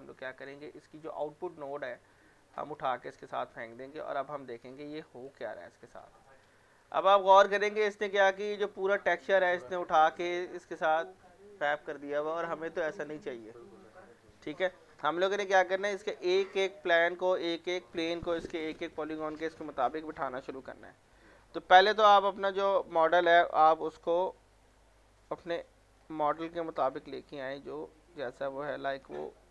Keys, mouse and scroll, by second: 0.7 scroll down 1, 1.0 middle click, 1.5 scroll, 1.7 middle click, 2.6 click, 4.9 click, 6.2-8.7 middle drag, 8.7 scroll up 1, 9.3-10.1 scroll down 1, 10.1-13.3 middle drag, 14.7 scroll down 1, 15.1 alt+middle click, 15.4-16.7 alt+scroll up 2, 16.7-17.1 scroll down 1, 17.6-18.8 scroll up 1, 19.8-20.3 scroll down 1, 20.3 alt+middle click, 22.2 click, 24.0 w, 24.3 middle click, 25.7 click, 26.2 alt+middle click, 26.7-29.0 drag, 27.8 click, 29.2 alt+middle click.